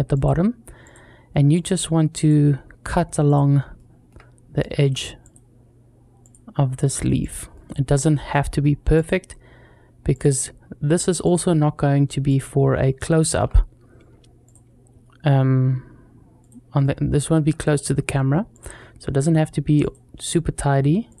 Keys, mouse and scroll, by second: 0.0-0.6 scroll up 2, 3.6 shift+middle click, 4.0-4.3 scroll down 1, 4.6-21.2 shift+drag, 7.3 shift+middle click, 12.4-12.7 scroll down 1, 12.8 shift+middle click, 16.6 shift+middle click.